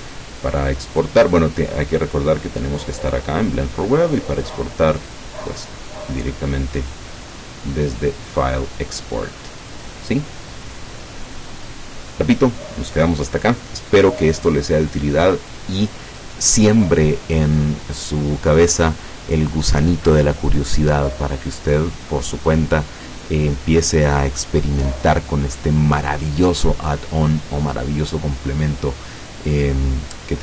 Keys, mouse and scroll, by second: 1.6 click, 3.0 click, 4.5 click.